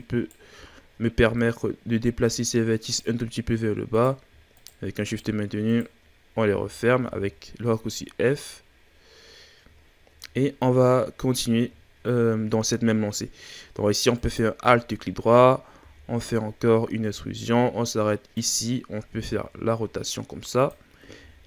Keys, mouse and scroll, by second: 0.7-1.4 shift+scroll up 1, 1.4 right click, 3.9 right click, 4.5 shift+right click, 5.1 shift+right click, 5.6 shift+right click, 6.5 f, 7.0 a, 7.3-8.0 scroll down 5, 8.0-8.6 scroll down 4, 8.6-9.3 scroll up 7, 9.3-9.8 scroll down 2, 10.1 shift+scroll up 2, 10.4-10.7 ctrl+scroll down 3, 10.7-12.0 scroll up 1, 12.0-14.1 scroll up 2, 14.1 alt+right click, 15.8 e, 19.1 r, 21.2 g.